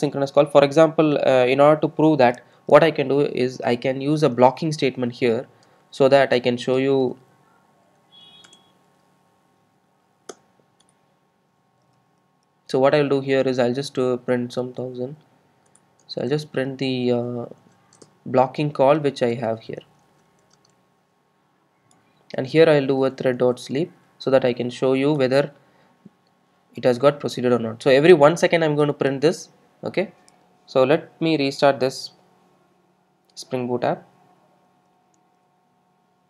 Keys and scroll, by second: 7.4 Tab, 8.9 Tab, 12.0 super+z, 17.0 Tab, 25.2 Return, 31.9 super+r.